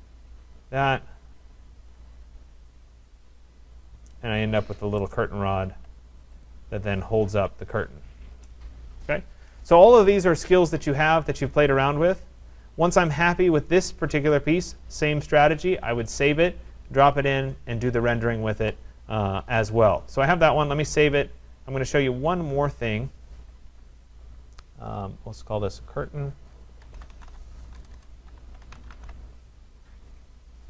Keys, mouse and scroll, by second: 0.4 click, 1.2 Return, 1.7 Return, 3.2 click, 3.8-4.3 scroll, 4.3-4.6 scroll down 6, 5.0 right click, 5.8-6.1 scroll down 3, 6.4 click, 6.7-8.3 scroll, 10.8 click, 11.0 click, 11.2-11.7 scroll down 5, 12.2-12.5 scroll down 5, 12.7-13.1 scroll up 3, 13.7 middle click, 14.3 right click, 18.7 right click, 21.2 click, 22.7 click, 25.5 click, 26.5 click, 26.6-29.5 typing.